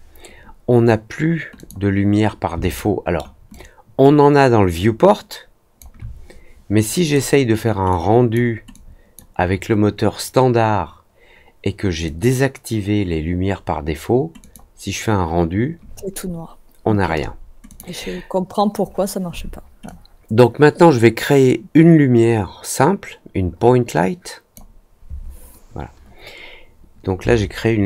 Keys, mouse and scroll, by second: 1.5 click, 2.7-3.1 alt+middle drag, 3.4-5.7 alt+drag, 7.0 click, 7.8-8.3 drag, 8.7-9.1 drag, 12.0 click, 14.3 click, 17.6 click, 19.8-24.5 drag, 27.6-27.8 scroll down 4.